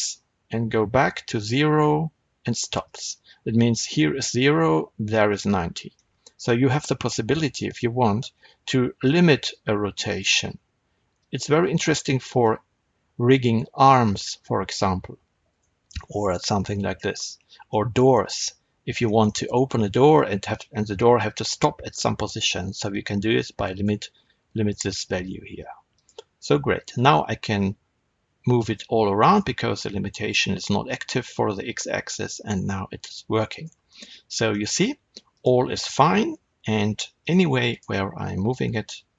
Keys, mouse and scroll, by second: 2.8 right click, 5.8-9.5 middle drag, 9.5 r, 15.5 right click, 15.8-23.7 middle drag, 22.8 r, 23.7 right click, 25.8 click, 26.5 r, 29.2 right click, 32.2 r, 33.8-35.2 middle drag, 35.2 click, 36.1 g, 37.2 right click, 37.6 click, 38.5 g.